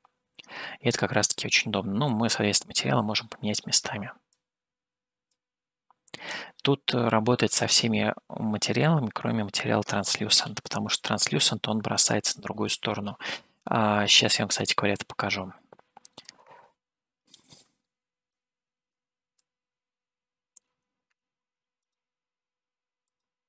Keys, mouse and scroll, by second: 4.5-5.7 drag, 7.5-9.2 middle drag, 15.4 shift+a.